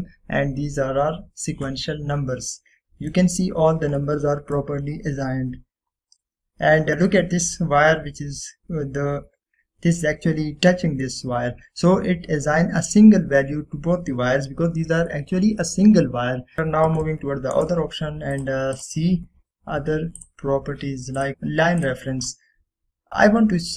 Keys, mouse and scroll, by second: 3.0 scroll down 1, 3.6-4.3 middle click, 4.5-5.0 scroll down 1, 5.1-5.7 middle click, 6.3-7.0 scroll up 1, 7.0-8.1 scroll down 1, 8.1 scroll up 1, 8.2-8.8 middle drag, 13.7 scroll up 1, 15.7 scroll down 1, 16.2-17.1 middle drag, 18.7 right click, 19.5 click, 19.9 typing.